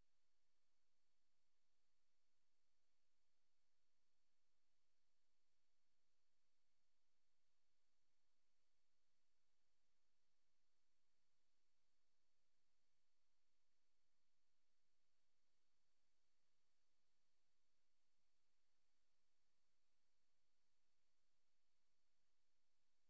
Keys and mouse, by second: 1.9 click, 3.6 ctrl+z, 4.0 ctrl+click, 4.6 click, 4.8 click, 5.8 click, 7.2 click, 8.0 click, 9.7 click, 11.0 click, 12.9 click, 14.6 click, 17.5 click, 20.4 Right.